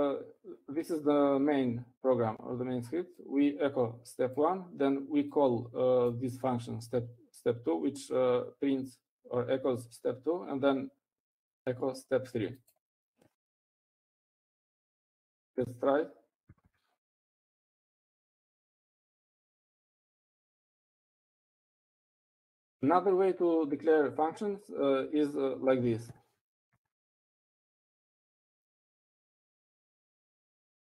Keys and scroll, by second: 0.8 Down, 1.5 Down, 15.2-16.3 typing, 17.6-21.1 typing, 21.6 Up, 25.8 Up, 26.1 Up, 26.5 Up, 27.6 typing, 29.2-30.6 typing.